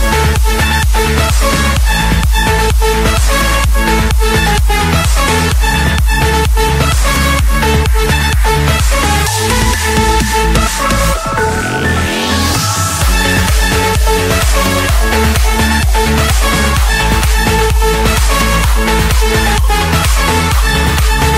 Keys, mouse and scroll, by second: 2.0-3.0 scroll down 1, 3.0 scroll down 1, 3.2-4.3 scroll up 1, 4.3 scroll up 1, 4.6-6.2 typing, 7.2 Return, 8.5 click, 10.7-12.4 typing, 12.9 Return, 13.9 scroll, 14.0-15.4 scroll down 3, 15.4 Escape, 17.3 click, 18.9-19.3 scroll down 4, 19.3-20.5 scroll, 20.8 click.